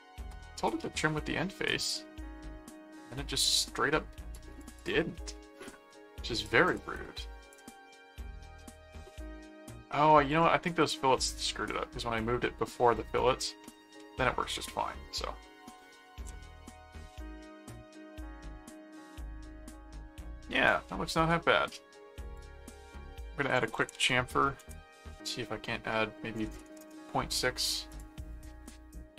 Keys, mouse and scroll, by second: 0.8-3.5 middle drag, 4.3 click, 6.4 click, 9.1 middle click, 10.3 click, 11.2 middle click, 13.6 middle click, 14.7 middle click, 16.1-21.9 middle drag, 22.3 click, 22.7-24.5 typing, 24.6 Return, 27.9 click, 28.6 middle click.